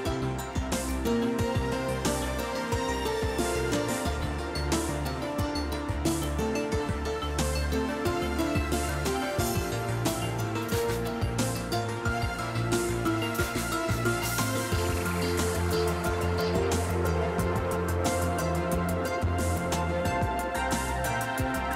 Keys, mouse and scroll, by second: 0.2 Tab, 1.1-3.2 middle drag, 4.4 click, 8.2 click, 10.2 click, 12.6-13.7 typing, 14.2 Home, 14.8-16.2 typing, 16.6 Return, 19.8 click.